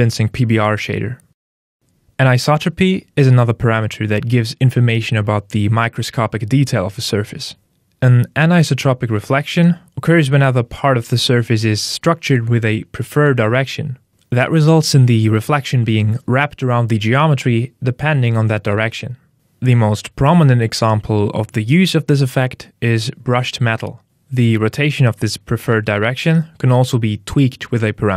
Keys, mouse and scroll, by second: 1.7 click, 4.1 click, 18.6 click, 21.1 click, 25.5 click, 27.2 click.